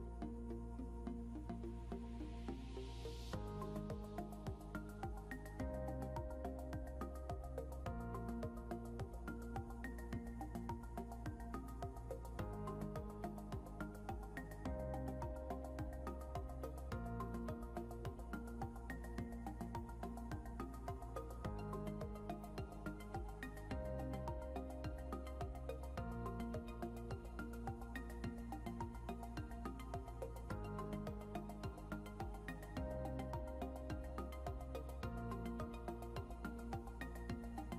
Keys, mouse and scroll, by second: 14.8 ctrl+v, 17.4 scroll down 1, 18.2 scroll down 1, 19.9 ctrl+q, 22.3 click, 31.8 scroll up 1, 33.7 click, 36.9 click.